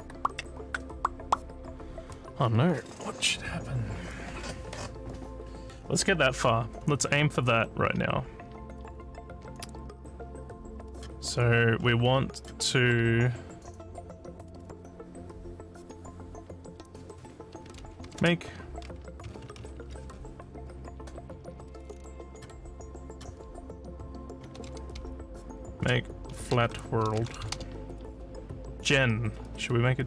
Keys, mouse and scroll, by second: 10.9 click, 11.3 scroll down 2, 11.8 scroll up 2, 12.3 click, 17.8 a, 18.0 e, 22.2 click, 24.4-28.0 typing.